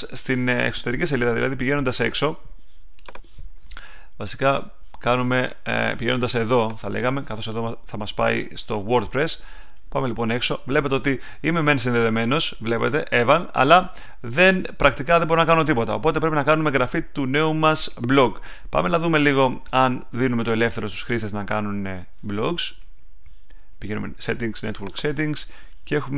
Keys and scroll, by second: 9.6 BackSpace, 10.2 Return, 18.7 super+Tab.